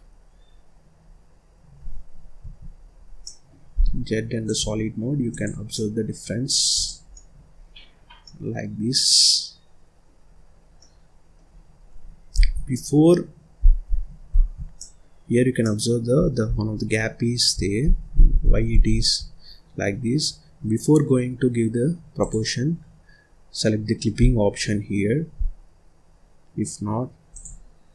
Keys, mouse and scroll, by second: 2.7-3.1 scroll down 5, 3.1 middle click, 3.7 z, 5.2 click, 5.6-6.6 middle drag, 6.6 click, 7.0 middle click, 7.5-7.9 scroll up 1, 7.9 scroll down 1, 8.1-10.2 middle drag, 10.2-10.5 scroll up 1, 10.5 scroll down 1, 10.7-12.2 middle drag, 12.2 ctrl+z, 13.8 ctrl+z, 14.7 middle click, 15.2-15.5 scroll up 1, 15.5 middle click, 16.1-16.9 scroll down 8, 16.9-17.7 scroll up 4, 17.7 ctrl+z, 18.0 ctrl+z, 18.3 ctrl+z, 18.6 ctrl+z, 19.3-22.1 scroll up 2, 22.1 click, 24.1-24.4 scroll down 1, 24.4 scroll up 1, 25.3 z.